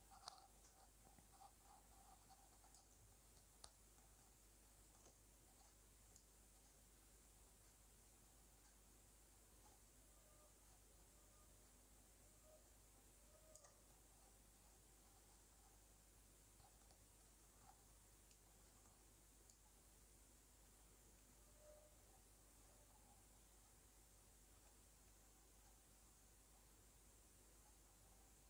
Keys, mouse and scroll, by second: 0.8-2.0 middle drag, 2.3 middle click, 2.7-9.7 drag, 9.7-10.2 scroll down 5, 9.8 shift+middle click, 10.6 f, 11.0-13.6 drag, 13.8 middle click, 14.0 shift+middle click, 14.5 middle click, 15.1-16.1 drag, 18.1 middle click, 18.6 click, 20.8 click, 21.5 middle click, 21.5 scroll down 2, 21.7 middle click, 22.3 click, 23.3 middle click, 23.9 click, 24.3 click, 24.5 middle click, 24.9 click, 25.2 middle click, 25.8 scroll down 3, 25.8 shift+middle click, 26.0 middle click, 26.2 shift+middle click, 26.4 middle click, 26.6 middle click, 26.8 shift+middle click, 27.2 click, 27.5 middle click, 27.8 middle click, 28.0 scroll up 2, 28.2 middle click.